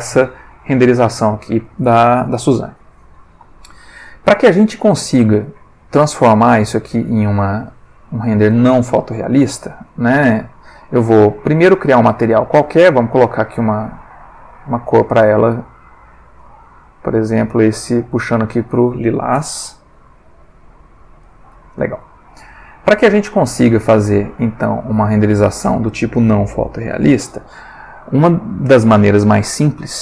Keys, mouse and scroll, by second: 7.3 click, 8.7 click, 10.3 click, 11.4 click, 12.8 click, 13.7-15.5 drag, 16.4 click, 17.1 click, 19.4 F12, 21.2-21.9 drag, 25.0 click.